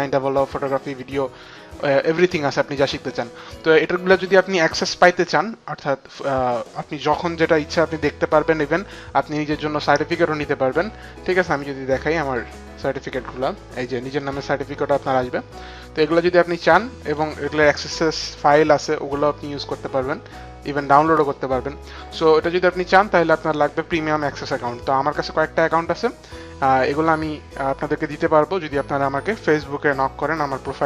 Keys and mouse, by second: 10.2 click, 12.3 click, 14.3 click, 16.6 click.